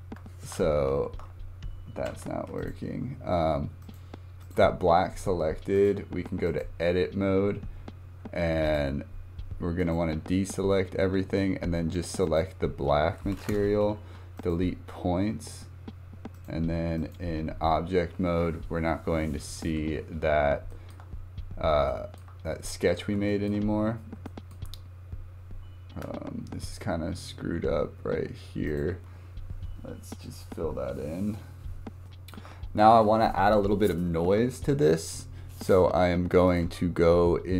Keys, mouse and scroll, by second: 2.1 ctrl+z, 2.6 click, 3.8 click, 4.4 click, 5.7-8.8 drag, 9.8-13.8 drag, 13.8 Delete, 16.4-19.5 drag, 19.8 scroll up 2, 20.2 scroll down 3, 20.7-21.0 shift+middle drag, 21.0 scroll up 3, 21.4 scroll down 2, 21.9-22.3 shift+middle drag, 22.3 scroll down 1, 23.3 shift+middle click, 23.7 scroll up 2, 24.2-24.8 shift+middle drag, 24.8 scroll up 1, 25.6 scroll down 2, 28.7 click, 32.0 scroll up 2, 32.1 shift+middle click, 32.5-32.9 scroll down 1, 36.5 click.